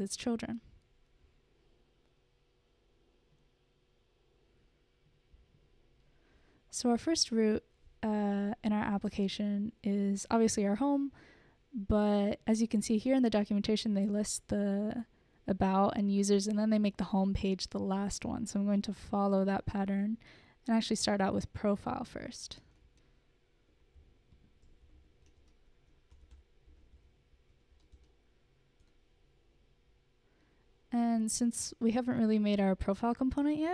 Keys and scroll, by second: 22.6-28.6 typing, 28.2 Right, 29.5 Return.